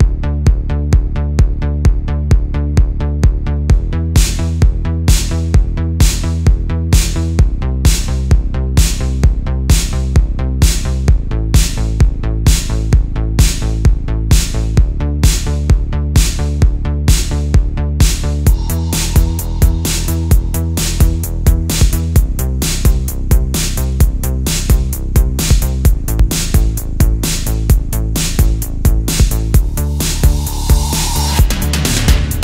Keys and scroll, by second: 1.8 space, 3.1 space, 4.9 space, 8.6 super+z, 8.8 space, 10.1 super+z, 11.8 super+z, 12.5 space, 13.3 space, 13.7 space, 14.1 space, 14.5 super+z, 16.0 super+z, 17.7 space, 19.7 super+z, 20.1 super+z, 22.7 space, 23.0 space, 24.1 space, 24.6 space, 25.2 super+space, 25.5 super+space, 26.0 super+space, 26.8 space, 29.2 alt+super+space, 29.8 alt+super+space, 30.3 alt+super+space.